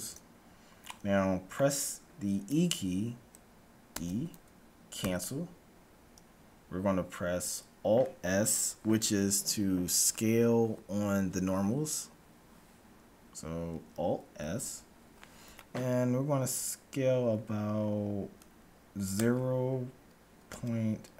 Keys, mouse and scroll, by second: 1.0-2.8 middle drag, 1.3 right click, 4.0 e, 14.1 alt+s.